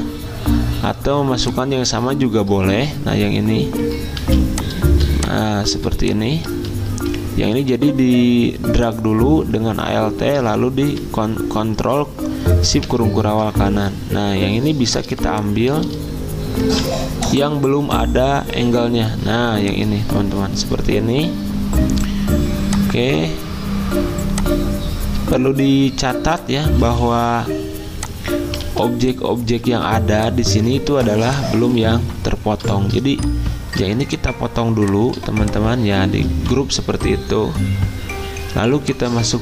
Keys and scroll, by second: 2.3 alt+Tab, 4.2 z, 5.7 v, 6.5 ctrl+z, 19.5-20.3 typing, 27.0 ctrl+z, 28.7 ctrl+z, 29.7 ctrl+z, 30.8 ctrl+z, 36.4 ctrl+z.